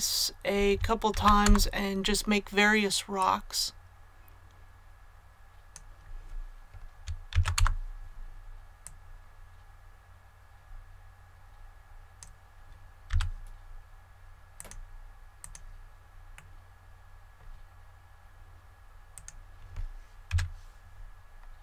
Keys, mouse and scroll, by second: 1.1 shift+d, 1.4 Return, 3.1-6.0 drag, 7.3 shift+d, 7.5 Return, 8.8-13.0 drag, 13.0 a, 14.5 click, 16.3-18.0 middle drag, 19.1 right click, 20.2 g, 21.0-21.6 scroll down 1.